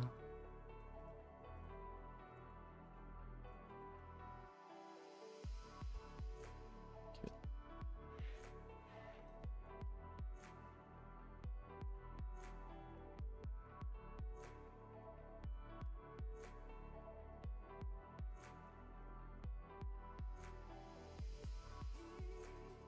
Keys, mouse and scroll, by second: 0.2-1.0 scroll, 1.0 click, 1.6 click, 6.5 scroll up 1, 8.2 shift+middle click, 10.6 click, 18.0 t.